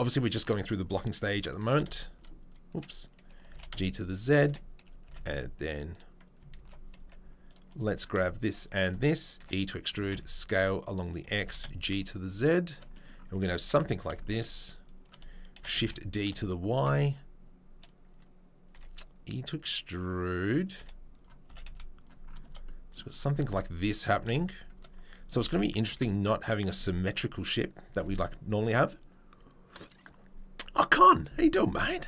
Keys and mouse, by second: 0.5-1.7 middle drag, 1.7 click, 1.9 shift+middle click, 2.1 click, 3.7 shift+middle click, 4.3 click, 11.6-12.7 shift+middle drag, 12.7-14.3 drag, 14.3-32.0 middle drag.